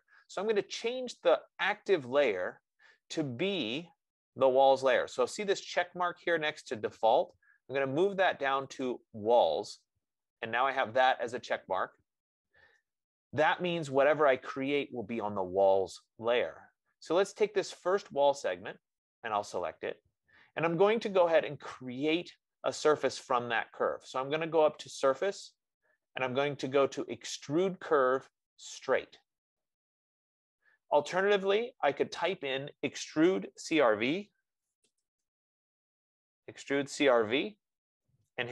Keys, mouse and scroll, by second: 1.2 F15, 9.2-14.2 drag, 18.3-23.3 drag, 25.3-30.3 drag, 32.7 click, 34.1 click, 34.5-36.6 typing.